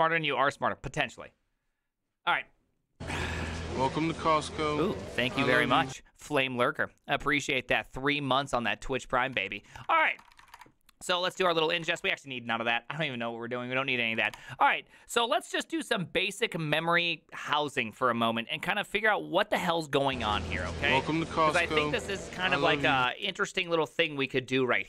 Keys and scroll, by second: 9.9 alt+{, 9.9 ctrl+c, 10.0 ctrl+:, 10.1-12.4 typing, 10.2 Return, 10.3 ctrl+c, 10.4 ctrl+:, 10.6 Return, 14.3 Return, 14.3 shift+o.